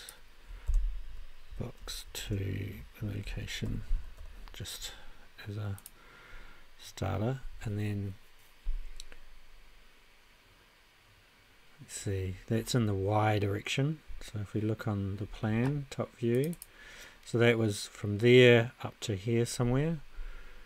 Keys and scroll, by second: 0.4-4.7 typing.